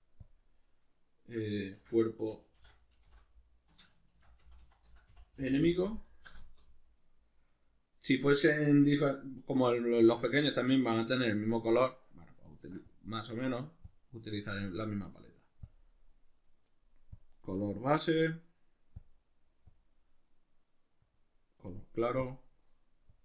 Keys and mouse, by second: 6.3 Return, 17.2-23.2 drag.